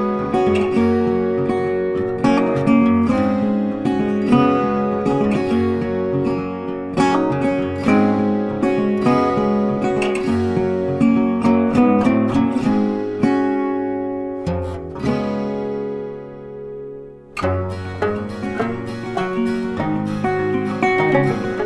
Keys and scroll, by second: 8.9 ctrl+t.